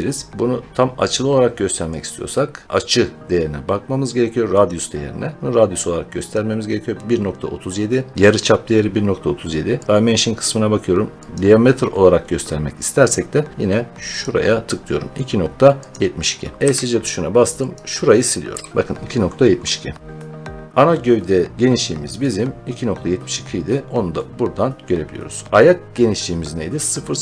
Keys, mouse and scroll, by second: 0.3 Escape, 1.9 click, 4.6 click, 5.4 click, 6.2 click, 9.8 click, 11.3 click, 15.8 click, 16.5 Escape, 17.6 click, 18.4 Delete, 18.7-19.8 scroll, 24.0 scroll, 27.0 scroll.